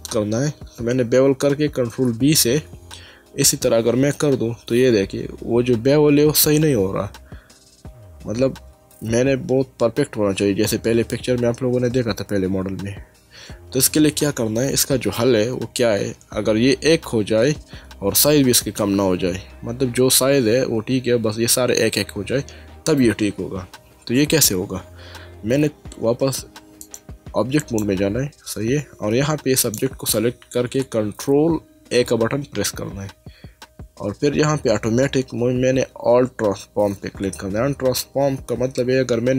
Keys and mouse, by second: 2.1 ctrl+b, 14.5 Escape, 26.8 click, 29.6 click.